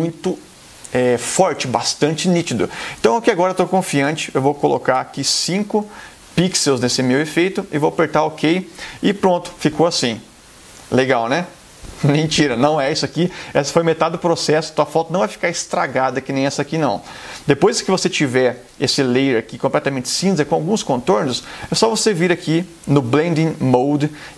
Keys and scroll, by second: 4.2 BackSpace, 5.0 5.